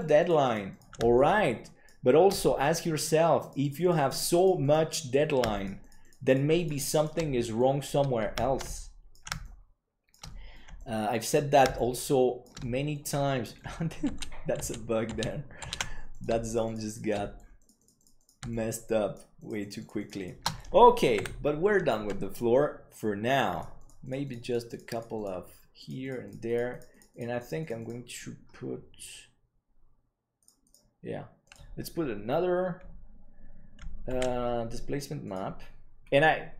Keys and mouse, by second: 33.2 click, 34.8 ctrl+s, 35.2-36.5 drag.